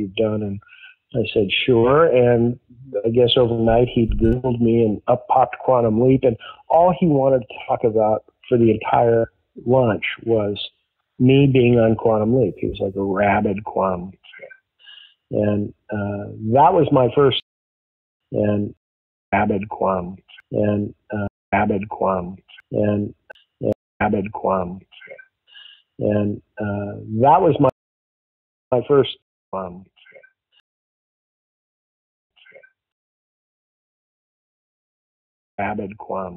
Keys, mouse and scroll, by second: 0.4 click, 1.7 click, 3.0-4.0 drag, 4.2 click, 4.8 ctrl+s, 8.0-9.2 drag, 9.5 click, 10.5 click, 11.2-13.1 drag, 14.8 click, 16.3 click, 18.0 ctrl+shift+Delete, 18.1 space, 18.7 space, 19.2 click, 19.2 space, 21.2 space, 21.4 click, 21.4 space, 23.2 ctrl+z, 23.6 space, 23.8 click, 23.9 space, 27.4 click, 27.6 click, 28.6 space, 29.1 space, 29.4 click, 29.4 space, 30.5 space, 30.8-32.2 drag, 32.2 space, 33.1-34.9 drag, 35.3 click, 35.5 space.